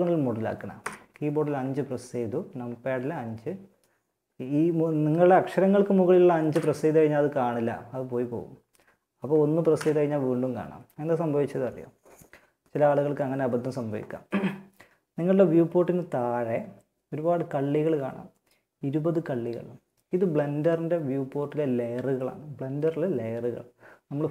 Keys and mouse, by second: 0.0 KP_5, 5.7 5, 9.2 1.